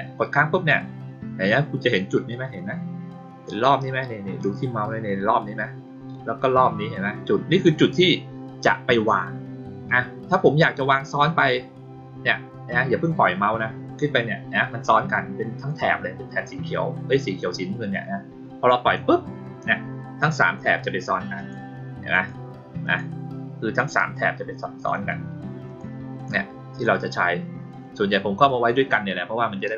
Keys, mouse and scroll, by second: 21.3 click, 22.1 click, 22.8 click, 24.1 click, 25.6 click, 26.1 click, 26.7 click.